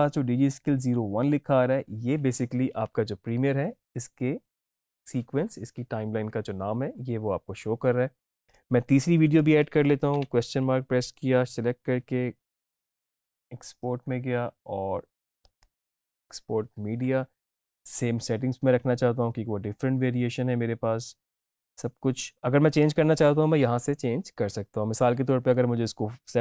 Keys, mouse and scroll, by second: 2.8 alt+Tab, 8.4-10.4 drag, 12.3 ctrl+Num_Lock, 12.7 ctrl+m, 13.1 click, 15.3 click, 22.7 click.